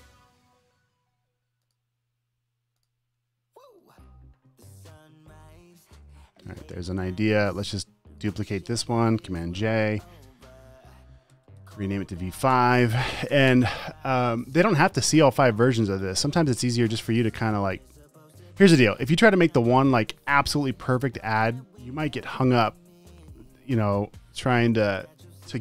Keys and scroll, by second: 0.3 v, 5.0 space, 5.5 v, 6.0 super+s, 6.2 space, 7.0 space, 9.8 super+j, 10.4 shift+super+r, 11.4 Right, 11.8 BackSpace, 13.7 5, 13.8 Return, 22.9 super+s.